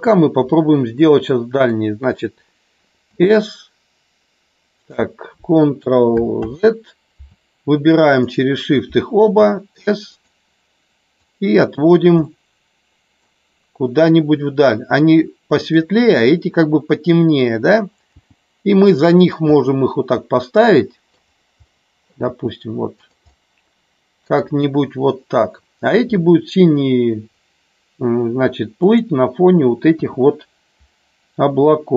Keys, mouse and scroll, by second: 0.4-1.6 middle drag, 3.2 s, 4.8 click, 6.4 ctrl+z, 8.1 shift+click, 9.4 s, 10.0 click, 11.2 click, 12.2-13.3 middle drag, 13.2 scroll down 1, 14.1-15.7 middle drag, 14.1 scroll up 1, 16.2 middle click, 18.1 g, 19.2 click, 19.4-21.1 middle drag, 19.4 scroll up 1, 21.5 scroll up 1, 21.7 middle click, 21.9 scroll down 1, 22.3 g, 22.9 click, 23.3 scroll up 1, 23.4 middle click, 28.7 click, 30.0 KP_1.